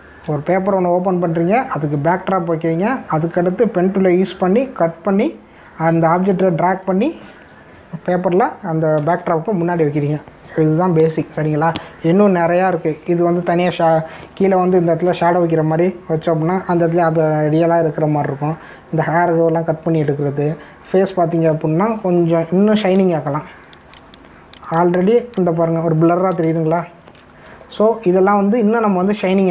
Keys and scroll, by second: 23.9 space, 27.6 ctrl+=.